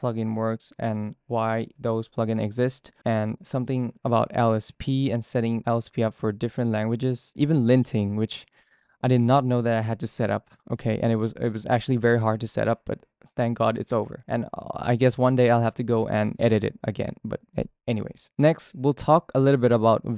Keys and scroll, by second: 0.0-3.0 typing, 3.5 ctrl+k, 3.8 Return, 4.2-6.5 typing, 6.6 ctrl+d, 7.2 ctrl+d, 7.4 ctrl+d, 7.9 k, 12.4-15.4 typing, 17.3 ctrl+d, 18.2 ctrl+u, 18.3-19.6 typing.